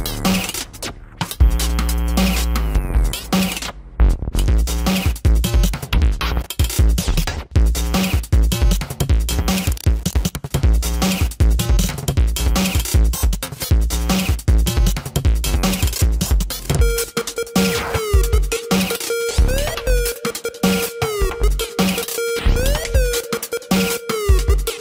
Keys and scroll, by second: 0.0 ], 0.4 ], 1.3 ctrl+-, 1.8 ctrl+-, 1.9 ], 2.4 space, 4.9 space, 6.1 space, 7.1 space, 9.0 ctrl+alt+z, 10.4 space, 11.2 ctrl+alt+z, 11.7 space, 14.3 space, 14.7 ctrl+-, 14.8 ], 15.5 ], 16.8-18.7 typing, 21.7 space, 23.2 space, 24.5 space.